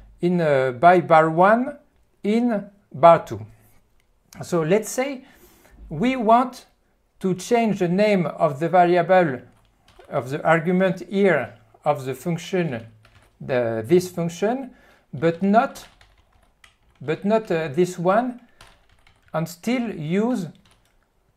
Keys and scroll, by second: 9.9-12.8 typing, 13.2 ctrl+n, 15.4 alt+q, 16.0 p, 16.2 p, 16.5 p, 17.2 q, 17.5 ctrl+n, 18.3 alt+q, 18.6-21.3 typing.